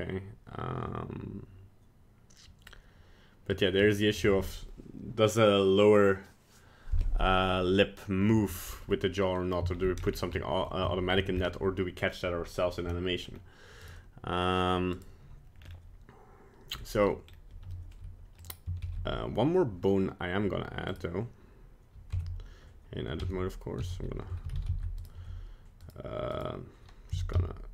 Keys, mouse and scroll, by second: 3.9 middle click, 4.2 middle click, 8.8 middle click, 8.9 middle click, 9.2 middle click, 9.4 middle click, 9.8-10.2 shift+scroll down 4, 10.4 middle click, 10.9 shift+middle click, 11.2 middle click, 11.4 scroll up 2, 13.3 scroll up 1, 13.9 right click, 14.9 right click, 15.6-16.1 scroll down 3, 16.7-17.4 scroll up 4, 17.8 shift+middle click, 18.4 click, 18.8 shift+a, 21.0 right click, 22.2 Tab, 23.3 Tab, 23.9 a, 24.5 alt+r, 24.6 alt+g, 24.7 alt+s, 25.1 right click, 25.3 Tab, 25.8 right click, 26.3 right click, 27.2 e.